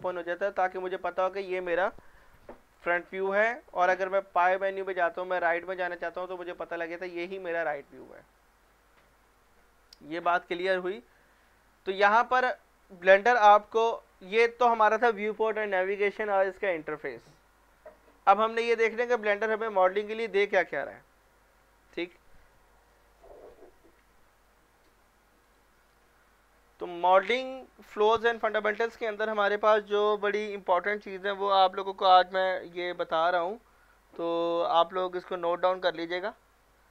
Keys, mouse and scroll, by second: 2.8 click, 5.4 click, 6.5 scroll down 1, 7.4-8.0 middle drag, 9.4-10.7 scroll down 1, 10.9 middle click, 11.4-12.3 scroll up 1, 12.3 click, 25.5 click.